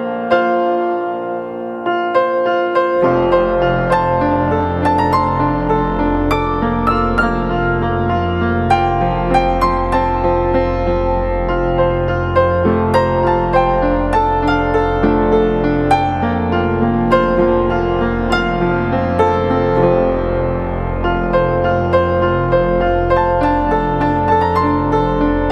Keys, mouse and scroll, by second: 2.3 ctrl+t, 4.9 alt+shift+click, 11.4 alt+shift+click, 24.3 Return.